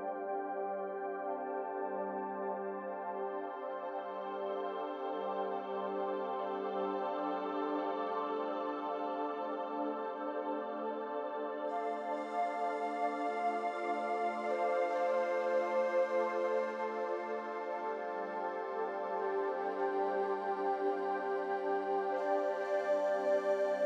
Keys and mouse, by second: 2.4-3.6 drag, 4.0 middle click, 5.1 Tab, 5.7 3, 7.7 click, 12.7 u, 14.8 a, 16.5 1, 17.5-18.2 drag, 19.4 r.